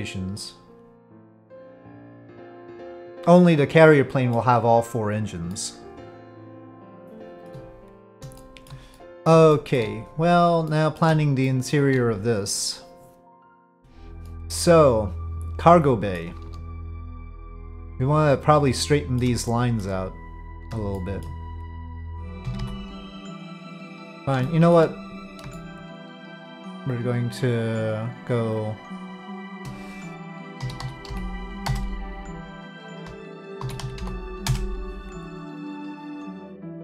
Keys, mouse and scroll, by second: 5.5-7.5 middle drag, 8.4 shift+middle drag, 8.9 middle drag, 9.5 shift+middle drag, 10.1 click, 10.6-11.0 middle drag, 11.4 shift+middle click, 13.8 Tab, 14.2-16.2 middle drag, 17.4-19.2 middle drag, 19.5 shift+middle click, 21.0 shift+click, 22.2 g, 22.4 g, 24.5 shift+click, 24.7 shift+middle click, 25.6 shift+click, 27.3 shift+click, 28.2-29.6 shift+drag, 30.6 s, 33.6 s, 36.2-36.8 drag.